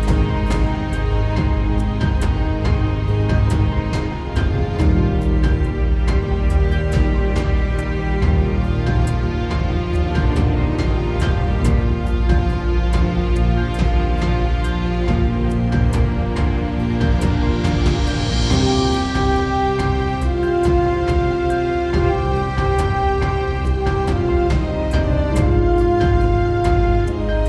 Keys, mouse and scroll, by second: 8.3 middle click, 17.3 middle click, 18.4 middle click, 20.1 middle click, 20.5 middle click, 21.5 middle click, 24.2 middle click, 25.4 middle click, 25.8 alt+middle click.